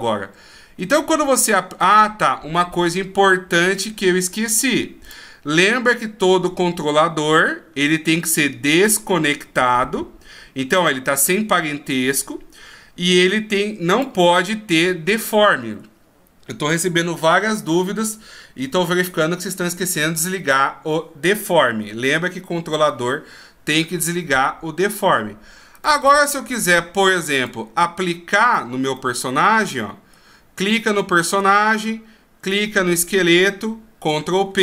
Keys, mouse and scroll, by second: 0.8 ctrl+z, 1.4 middle click, 5.1 click, 5.9 right click, 8.2 scroll down 5, 13.9 click, 25.7 click, 28.4 right click, 29.0 middle click, 31.1 shift+scroll up 1, 31.5 scroll down 2, 32.4 shift+right click, 34.1 ctrl+p.